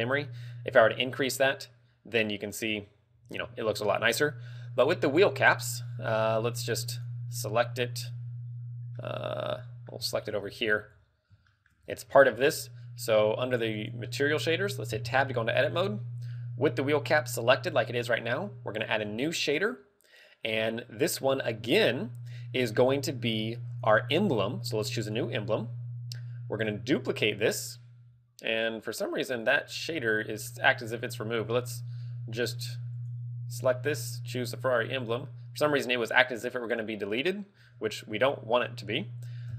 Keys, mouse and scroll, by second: 7.4 right click, 9.2 middle click, 10.6 shift+middle click, 10.7 scroll up 1, 11.1 z, 11.2 scroll up 2, 11.6 shift+middle click, 11.9 scroll up 5, 12.5 z, 13.9 click, 15.8 Tab, 19.2 click, 19.6 click, 23.8 click, 29.5 click, 29.8 scroll up 4, 30.6 middle click, 33.0 click.